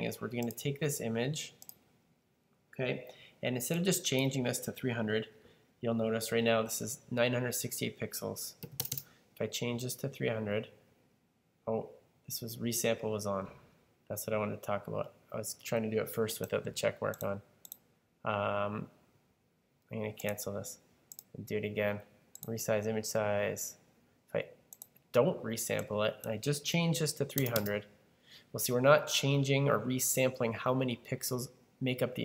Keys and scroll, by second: 8.2-9.3 typing, 26.7-27.9 typing.